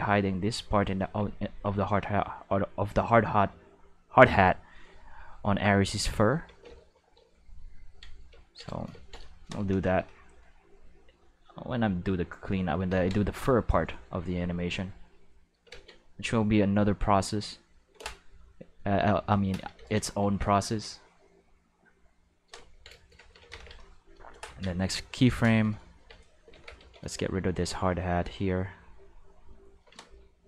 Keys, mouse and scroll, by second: 3.0-4.5 drag, 5.6 click, 6.6 ctrl+z, 7.1 ctrl+z, 10.8 click, 12.0 click, 12.9 ctrl+z, 13.2 click, 14.5-15.5 drag, 15.7 ctrl+z, 16.2-17.9 drag, 19.7 ctrl+z, 20.5-22.3 drag, 22.8 ctrl+Tab, 23.5 ctrl+s, 25.9 Tab, 26.5 alt+a, 26.8 c, 27.1 click, 28.8 click, 29.5 right click.